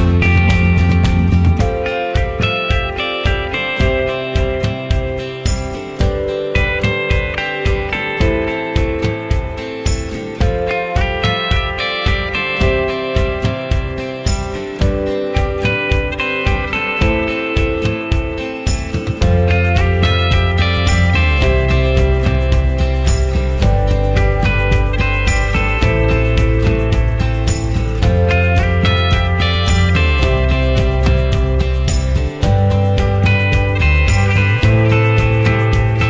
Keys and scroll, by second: 27.1 ctrl+0.